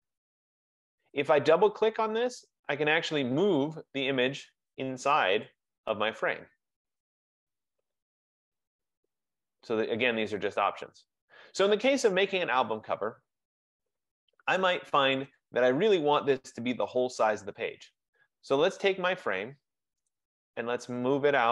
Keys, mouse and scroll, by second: 1.2 click, 2.9 click, 5.4 click, 9.2 click, 14.7 click, 15.4 click, 18.6 click.